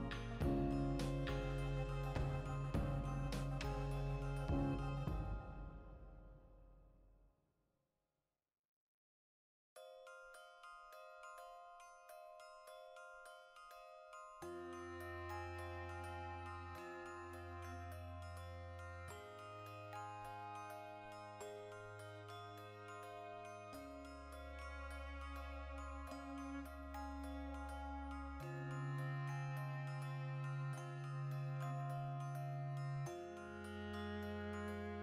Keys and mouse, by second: 0.6 e, 1.1 click, 1.3 s, 3.4 Return, 4.0 ctrl+r, 5.5 right click, 5.7 ctrl+z, 6.7 click, 6.9 ctrl+r, 8.0 right click, 9.1 alt+shift+right click, 9.7 x, 10.5 v, 10.7 right click, 11.1 l, 11.8-15.1 ctrl+shift+middle drag, 14.9 1, 15.1 right click, 15.6 shift+s, 16.1 Tab, 17.4 2, 17.7-19.4 alt+right drag, 19.4 x, 19.8 Escape, 19.9 v, 20.3 right click, 20.7 l, 21.2 x, 21.9-23.4 shift+middle drag, 22.9 1, 23.4 right click, 23.8 shift+s, 24.5 alt+right click, 25.0 ., 25.5 s, 26.1 Return, 26.6-27.7 shift+middle drag, 27.7 right click, 28.0 shift+s, 29.7 Tab, 30.1-33.5 drag, 33.5-35.0 shift+middle drag.